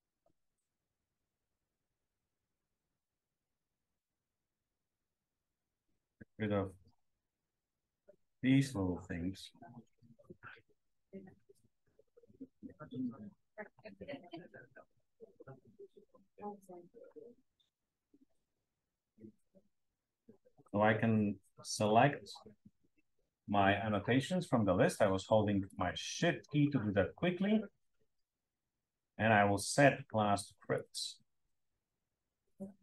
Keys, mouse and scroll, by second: 2.7-3.6 scroll down 2, 3.6-4.8 scroll up 3, 6.3 click, 7.9 click, 9.8 b, 10.3 click, 11.3 click, 12.0-13.0 drag, 13.9 BackSpace, 14.9 click, 16.6 m, 17.4-18.2 drag, 18.5-19.0 drag, 19.1-19.5 drag, 20.5 click, 21.7-22.6 shift+drag, 25.6 click, 26.5 shift+click, 30.7 click.